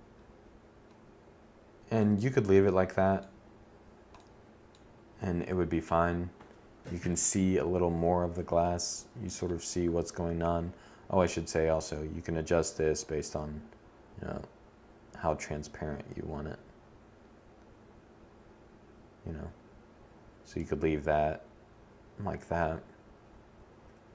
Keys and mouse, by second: 2.7 middle click, 4.4-12.4 drag.